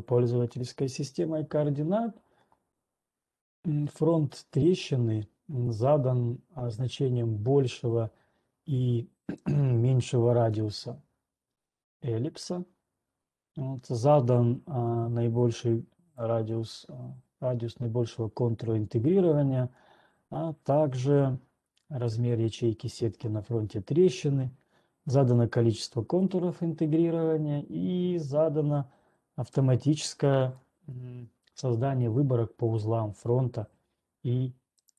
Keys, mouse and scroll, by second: 11.0 click, 16.5 click, 23.5 click, 26.5-27.0 scroll, 30.5-31.5 scroll.